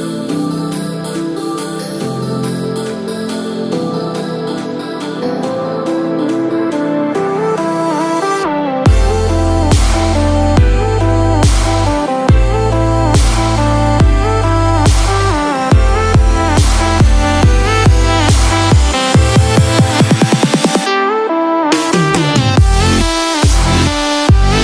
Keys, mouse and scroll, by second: 13.6 click, 14.4-15.0 scroll down 4, 14.8 middle click, 16.8 scroll down 1, 17.1 scroll up 1, 17.8 middle click, 17.8 scroll up 3, 20.5-20.8 scroll up 2, 20.8-21.6 scroll down 1, 21.6 scroll down 1, 22.8 click, 23.8-24.3 scroll up 2, 24.3 shift+middle click.